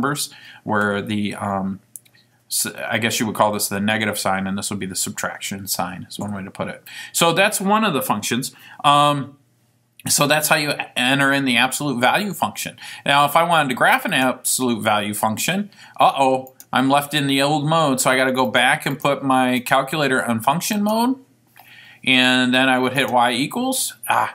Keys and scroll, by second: 18.6 Down, 19.0 Down, 20.0 Down, 20.9 Return.